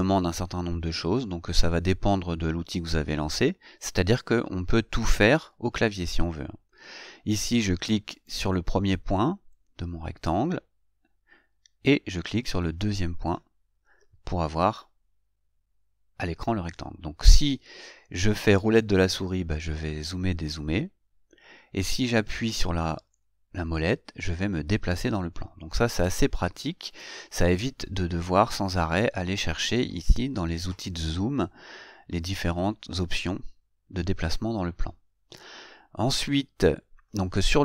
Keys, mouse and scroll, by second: 8.4 click, 19.0 scroll down 2, 19.4 scroll up 2, 20.2 scroll up 2, 20.8-21.2 scroll down 4, 21.6 scroll up 2, 22.6-26.5 middle drag.